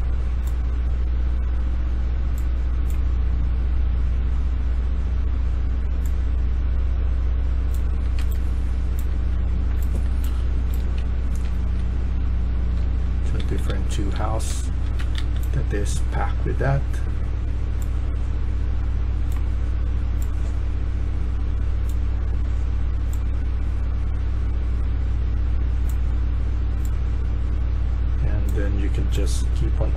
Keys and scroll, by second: 8.1 Escape, 9.0-15.6 typing, 19.4-20.1 typing.